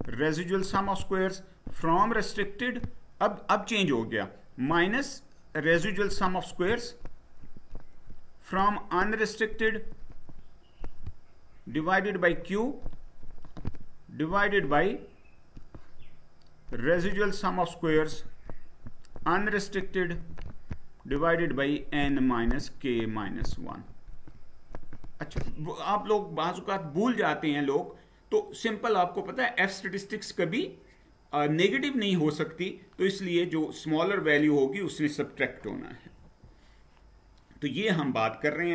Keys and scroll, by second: 36.2 Down.